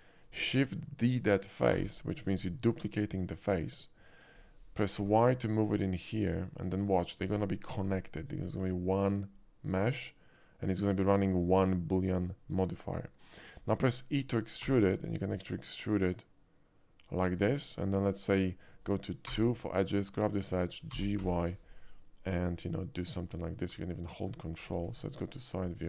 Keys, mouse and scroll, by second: 1.7 shift+d, 5.1 y, 6.9 click, 14.7 e, 17.3 click, 17.9 middle click, 19.3-21.3 typing, 20.0 click, 24.9 alt+middle click, 25.3 alt+middle click, 25.6 alt+scroll up 1.